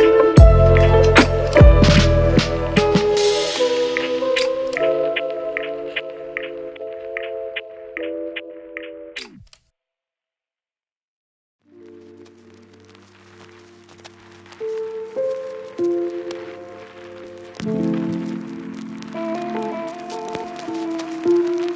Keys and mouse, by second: 2.6 middle click, 2.8 a, 2.9 a, 3.6 Tab, 3.9 Tab, 4.1 KP_Divide, 4.3 a, 4.7 shift+middle click, 5.1 click, 5.2 shift+middle click, 5.4 click, 5.4 shift+d, 5.7 r, 6.3 click, 6.3 middle click, 6.3 right click, 6.4 middle click, 6.9 middle click, 8.4 a, 9.0 ctrl+s, 9.6 a, 9.7-12.0 middle drag, 10.3 shift+a, 11.1 m, 12.4 a, 12.6 m, 12.7 shift+click, 13.8 Tab, 13.8-15.1 typing, 14.2 Tab, 15.3 Tab, 16.9 middle click, 17.4 shift+middle click, 18.3 shift+middle click, 18.5-19.8 middle drag, 20.2 n, 20.4 shift+KP_0, 21.4 ..